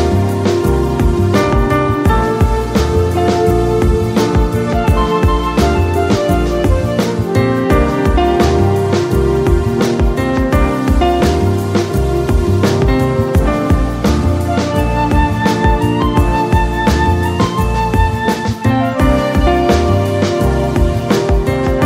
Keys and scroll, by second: 5.5 ctrl+d, 15.8 ctrl+z.